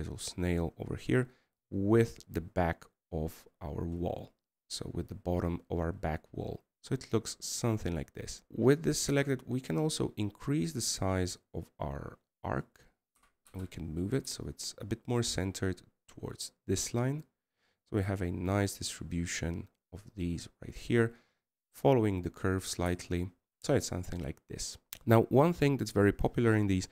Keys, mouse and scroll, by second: 0.2 scroll up 2, 0.5 middle click, 5.8-8.5 scroll down 1, 8.7-9.3 scroll down 1.